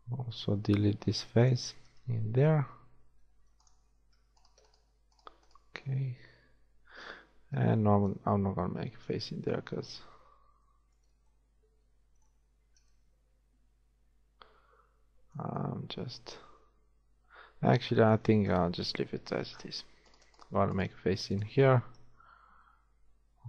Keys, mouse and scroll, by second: 0.6 x, 1.8 z, 3.1 ctrl+Tab, 4.1 z, 7.5 a, 7.7 middle click, 22.0 shift+f, 22.3 a.